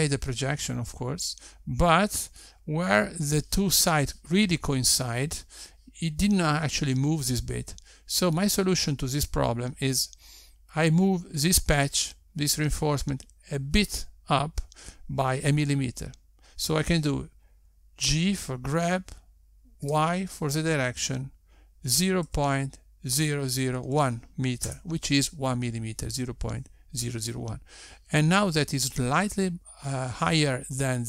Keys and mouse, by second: 19.9 g.